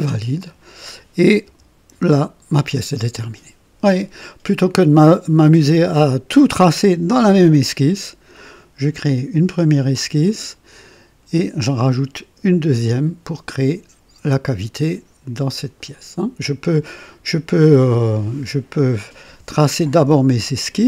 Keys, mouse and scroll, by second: 0.4 click, 1.5 KP_2, 2.0 KP_0, 18.8 click, 19.3 Delete, 20.0 click, 20.3 Delete.